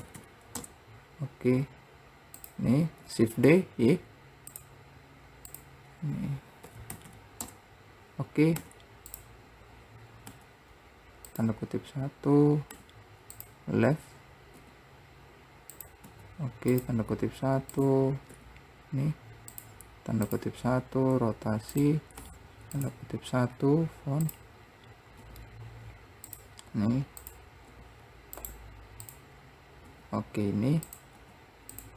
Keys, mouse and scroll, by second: 0.3 KP_0, 2.5 click, 3.2 shift+d, 5.7-7.2 drag, 7.2 KP_0, 14.7 r, 17.9 click, 18.5 r, 20.4 click, 20.9 r, 23.7-24.4 scroll up 2, 24.4 click, 27.4 click, 27.9 r, 29.2 click.